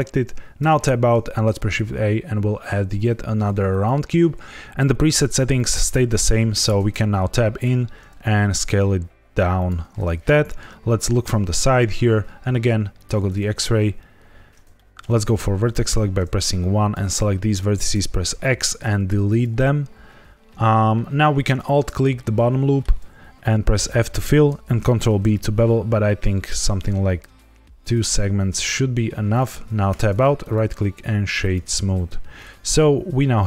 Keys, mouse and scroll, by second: 0.5 Tab, 1.5 shift+a, 6.5 Tab, 7.6 s, 9.5 click, 11.2 KP_3, 12.9 click, 14.0-14.6 scroll up 3, 14.7 shift+middle click, 15.7 1, 16.4 click, 17.9 x, 21.4 alt+click, 22.1 middle click, 23.7 f, 24.6 ctrl+b, 24.6 right click, 24.6 scroll down 1, 24.7 ctrl+b, 25.8-26.4 scroll down 1, 29.2 click, 29.8 Tab, 30.3 right click, 31.9 z, 32.6-33.3 scroll down 2, 33.3 middle click.